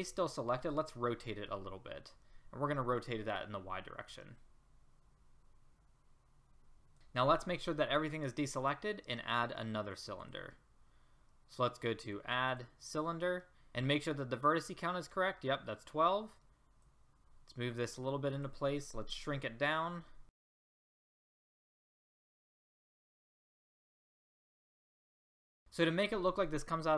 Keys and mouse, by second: 1.2 r, 4.3 click, 7.2 a, 13.6 middle click, 15.6 middle click, 16.4 click, 17.4 click, 19.1 s, 20.3 click, 20.4 s, 20.6 click, 21.4 middle click, 21.6 middle click, 22.0 s, 22.4 r, 23.0 r, 23.5 s, 23.9 click, 24.3 click, 24.6 r, 24.8 click, 25.1 middle click, 25.6 ctrl+z.